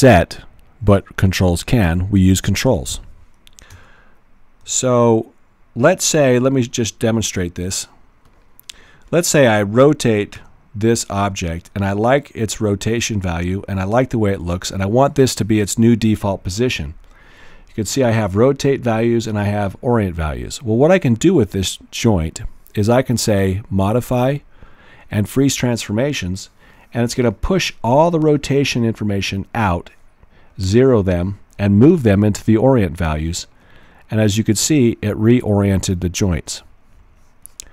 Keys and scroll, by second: 3.7 w, 4.7 x, 10.3-11.6 typing.